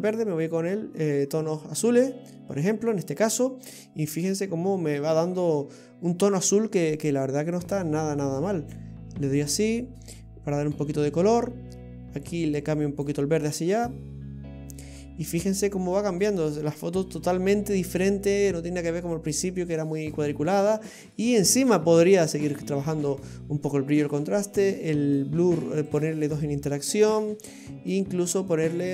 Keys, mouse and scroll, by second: 3.0-3.3 scroll down 4, 4.4-4.8 scroll up 7, 5.2 middle click, 6.0-7.8 scroll up 5, 7.8 click, 10.7-12.4 scroll down 6, 12.4 click, 14.9-15.6 scroll down 9, 17.1-19.1 scroll down 6, 19.4-20.4 scroll up 8, 20.4 middle click, 21.3-23.1 scroll up 10, 24.0 scroll down 2, 24.5 middle click, 25.9 click.